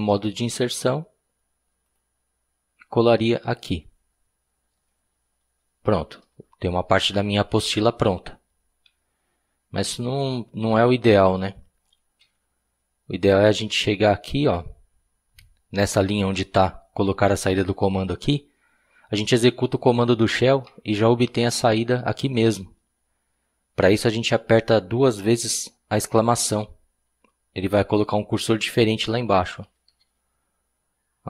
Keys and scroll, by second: 8.8 Escape, 12.2 u, 13.5 u, 29.6 typing.